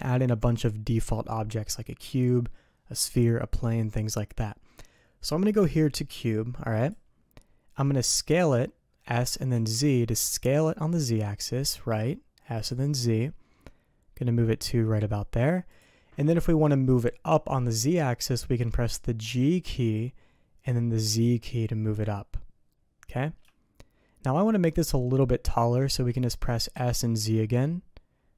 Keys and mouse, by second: 8.3 s, 19.2 g, 26.7 s.